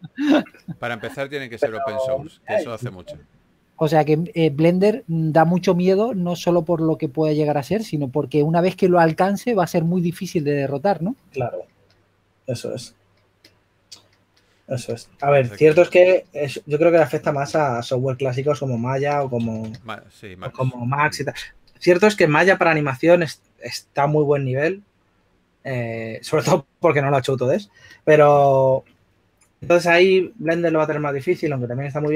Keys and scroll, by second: 0.0-0.4 typing, 6.2 s, 16.0 s, 28.8 typing.